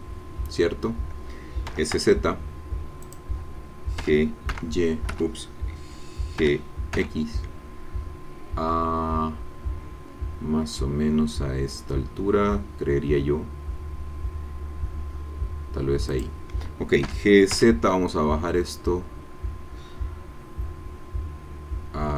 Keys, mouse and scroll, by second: 1.7 s, 2.0 z, 3.0 click, 4.0 g, 4.5 y, 5.1 Escape, 6.4 g, 6.9 x, 16.1 click, 17.0 g, 17.5 z.